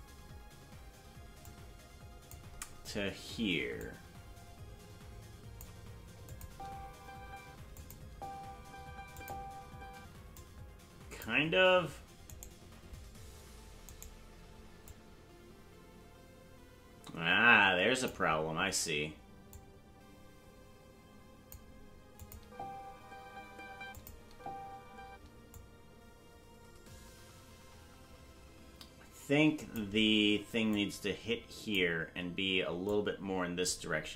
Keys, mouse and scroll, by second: 1.4 click, 3.8-5.6 drag, 6.3 click, 6.4 space, 7.7 space, 7.7 click, 8.0 space, 9.1 click, 9.9 space, 10.4 click, 12.5 right click, 14.1 right click, 14.8-18.1 drag, 19.5-21.5 drag, 22.2 click, 22.3 space, 23.8 space, 23.9 click, 24.2 space, 25.0 space, 25.5-29.7 drag, 30.7-31.7 drag, 32.8 click.